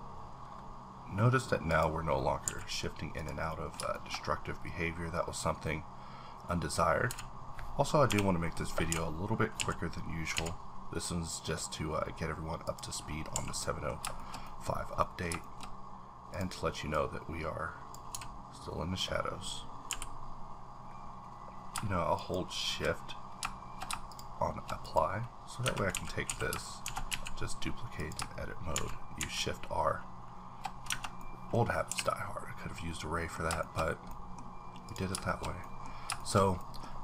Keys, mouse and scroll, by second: 0.4 scroll down 3, 1.7 click, 2.1-2.4 scroll up 3, 2.4 a, 2.5 middle click, 2.9 scroll up 2, 3.2 click, 3.5 middle click, 3.9 shift+middle click, 4.2-5.4 scroll up 1, 5.4-8.0 drag, 7.0-10.3 typing, 11.4-12.1 scroll down 6, 12.6 click, 12.9-13.3 scroll up 1, 13.3 a, 13.5 scroll up 1, 13.6 middle click, 14.2 shift+middle click, 14.3-15.0 shift+scroll up 2, 14.7 middle click, 15.0 middle click, 15.4 shift+middle click, 15.6-16.3 scroll up 2, 16.3 click, 17.2-18.3 drag, 19.9 b, 22.2 shift+click, 24.1 shift+click, 24.9 shift+click, 25.2-25.6 scroll down 2, 25.6 Tab, 25.9 a, 26.3 a, 26.8 shift+d, 27.0 scroll down 1, 27.1 z, 28.0 click, 29.1 click, 29.1 shift+r, 29.2 shift+r, 30.9 Tab, 31.2 middle click, 31.9 h, 32.0-33.6 middle drag, 33.6 shift+middle click, 33.8 scroll up 1, 34.8 click, 34.9 click, 35.3 shift+middle click, 35.6 shift+middle click, 36.6 shift+middle click, 36.8-37.0 scroll up 2.